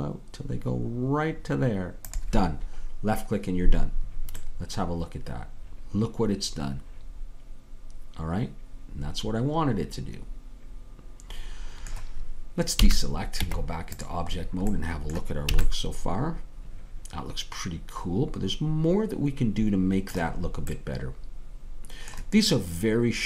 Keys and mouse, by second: 4.5-6.1 middle drag, 12.8 a, 13.4 Tab, 15.6 a.